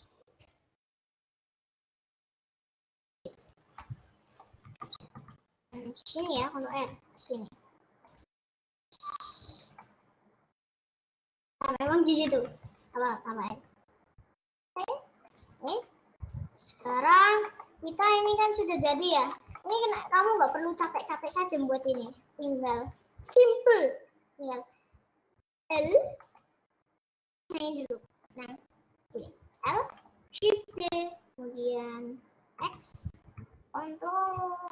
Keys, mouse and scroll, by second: 1.9 click, 4.0 middle click, 4.8 ctrl+z, 5.2 ctrl+z, 5.6 ctrl+z, 6.6 ctrl+r, 8.7 s, 9.9-11.0 middle drag, 11.0 ctrl+z, 12.2 ctrl+r, 13.5 s, 15.5 scroll down 2, 15.7 middle click, 16.3 scroll down 1, 17.0 scroll down 1, 17.2 Tab, 17.4 middle click, 17.8 scroll down 1, 18.0 middle click, 18.2-18.8 scroll up 7, 18.8 middle click, 19.2 scroll down 4, 19.6 shift+middle click, 19.8-20.2 scroll up 8, 20.4 Tab, 20.8-22.8 middle drag, 22.8 click, 23.4 middle click, 23.6-24.0 scroll down 4, 24.3 scroll up 3, 25.8 l, 26.4-28.4 middle drag, 28.4 click, 29.7 l, 30.1 middle click, 30.8 shift+d.